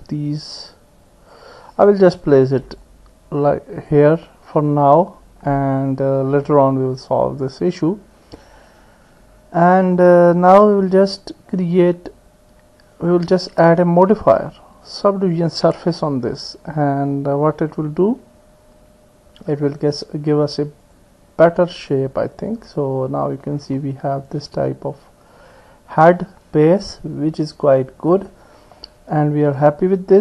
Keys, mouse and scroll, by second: 1.8 click, 2.8-3.9 drag, 13.1-15.6 drag, 20.9 click, 22.4 click, 23.4-28.8 middle drag.